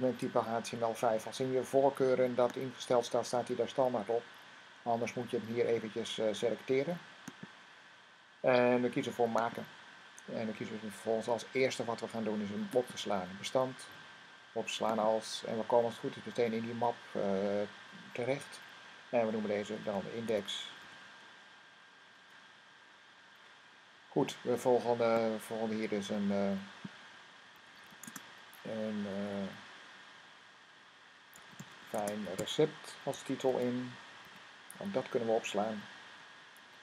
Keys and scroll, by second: 19.3-21.2 typing, 27.2-28.3 typing, 31.0-34.6 typing.